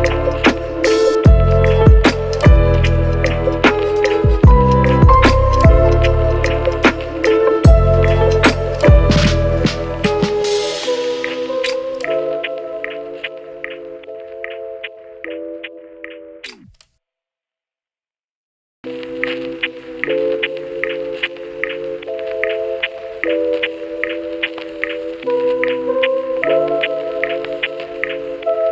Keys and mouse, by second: 0.2 shift+middle click, 0.5 shift+middle click, 0.8 g, 0.8 shift+middle click, 1.1 shift+middle click, 1.9 ctrl+r, 2.3 g, 3.6 ctrl+r, 4.3 shift+middle click, 4.5 g, 5.4 shift+middle click, 5.4 shift+z, 5.5 shift+middle click, 5.6 Tab, 5.8 KP_Divide, 6.2 Tab, 7.6 q, 7.8 ctrl+x, 8.0 Tab, 8.3 right click, 8.7 ctrl+q, 8.9 Tab, 9.3 Tab, 9.9 ctrl+shift+KP_Add, 10.0 q, 10.2 q, 11.0 ctrl+x, 11.0 ctrl+click, 11.3 Tab, 11.3 shift+click, 12.7 shift+click, 13.1 a, 13.3 click, 13.5 shift+z, 14.5 shift+z, 15.4 ctrl+shift+z, 17.0 ctrl+x, 17.3 ctrl+z, 17.5 ctrl+z, 17.7 Tab, 18.3 shift+z, 18.4 shift+click, 18.5 shift+z, 18.7 shift+z, 18.7 shift+click, 19.1 Tab, 19.2 alt+shift+click, 19.5 alt+shift+click, 19.8 ctrl+shift+KP_Add, 20.0 ctrl+shift+KP_Add, 20.2 q, 20.4 ctrl+x, 20.8 Tab, 21.4 KP_Divide, 21.5-23.3 typing, 22.7 shift+click, 23.0 shift+click, 23.2 shift+click, 23.3-25.4 shift+middle drag, 25.9 shift+click, 26.4 x, 26.5 shift+click, 26.8 shift+click, 27.0 shift+d, 27.3-28.7 middle drag.